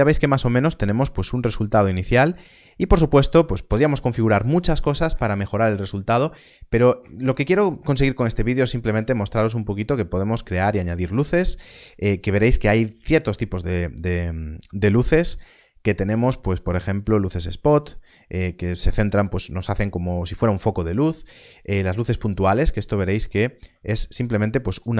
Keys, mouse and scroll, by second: 0.2 middle click, 5.8 middle click, 9.7 middle click, 10.5 alt+a, 15.1 shift+a, 22.1 click, 22.8 middle click, 24.6 g.